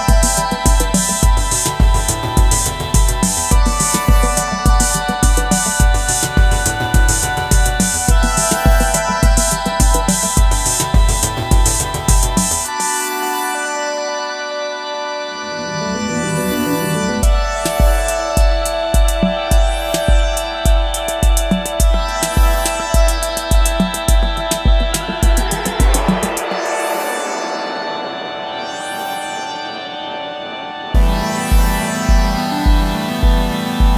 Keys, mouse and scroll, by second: 2.0-3.2 typing, 24.9 alt+click, 32.9 right click.